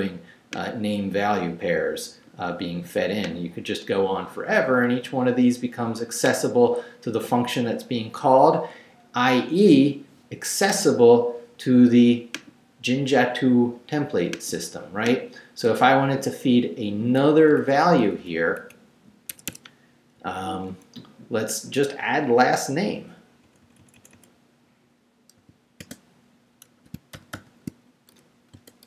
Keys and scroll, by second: 17.3 Down, 17.8 Up, 18.6 Down, 19.3 Escape, 20.2 Right, 21.4 Right, 23.4 Right, 25.4 i, 25.8 space, 27.1 shift+[, 28.5-28.8 typing.